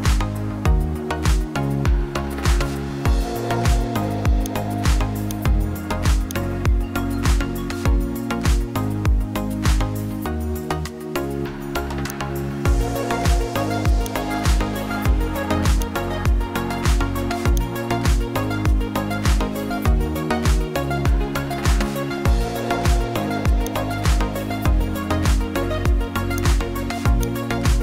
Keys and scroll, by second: 8.7 o, 20.0-20.9 typing.